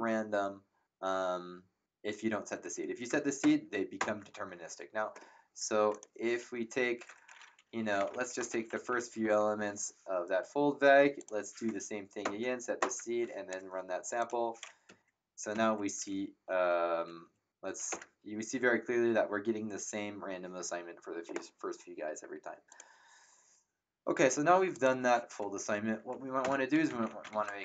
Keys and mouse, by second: 2.6 Up, 3.4 ctrl+Return, 5.9 click, 7.6-9.7 typing, 11.1 click, 12.2 Return, 14.2 click, 14.8 Up, 16.4 Down, 17.0 Up, 17.9 Return, 17.9 KP_Enter, 22.7 click, 24.7 click, 26.4 Return, 26.4 KP_Enter, 26.6-27.6 typing.